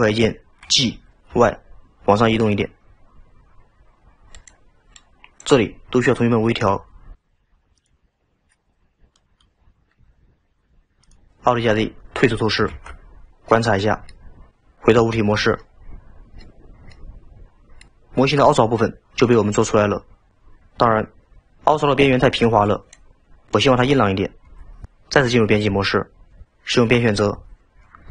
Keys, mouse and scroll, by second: 5.0 drag, 8.1 scroll down 1, 9.2 drag, 10.1 g, 12.8 alt+z, 13.2-13.6 scroll down 2, 13.6-14.7 middle drag, 15.2 Tab, 15.7-16.6 middle drag, 16.6-17.0 scroll up 2, 17.0-17.9 middle drag, 25.6 Tab, 27.2 2.